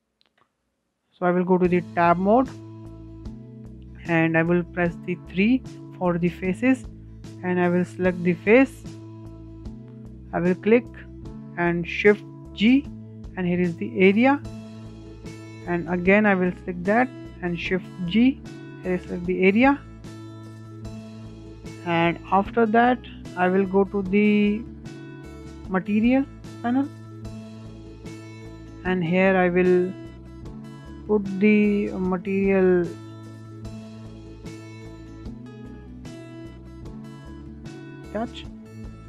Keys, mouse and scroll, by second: 0.1 Tab, 0.7-1.1 scroll up 2, 1.1-4.1 shift+middle drag, 5.1 3, 5.6 click, 8.5 click, 9.2-11.6 shift+middle drag, 11.6 shift+g, 15.6 shift+click, 17.1 shift+g, 20.5-22.5 shift+middle drag, 22.5 click, 24.1 click, 26.2 click, 27.0-30.1 drag, 37.3-38.2 scroll up 1.